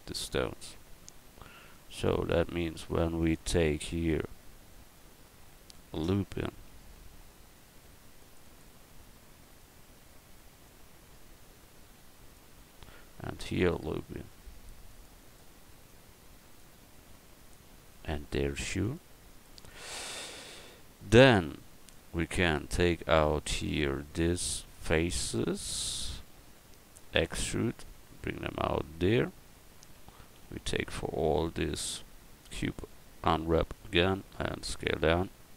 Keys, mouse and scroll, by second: 3.8 Tab, 6.7 ctrl+r, 11.8 click, 13.2 ctrl+r, 15.8-17.3 drag, 17.3-18.6 middle drag, 18.6 ctrl+r, 22.5 click, 26.2 middle click, 27.1 e, 27.9-29.5 drag, 30.0 a, 30.6 a, 31.3 u, 33.9 s.